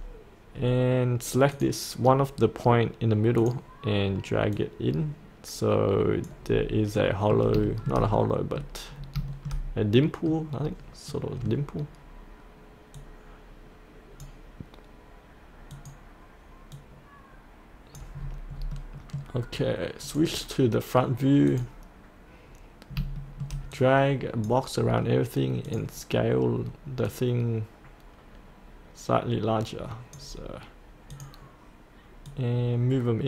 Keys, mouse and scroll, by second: 1.5-6.4 drag, 6.4-6.9 scroll up 1, 6.9 middle click, 7.6 shift+middle click, 8.8 scroll down 1, 9.3 shift+middle click, 9.5-9.9 scroll up 1, 9.9 middle click, 10.5 scroll down 1, 11.1 middle click, 12.9-18.1 drag, 18.7 middle click, 18.9 middle click, 20.0 click, 23.1 shift+middle click, 23.7-25.0 drag.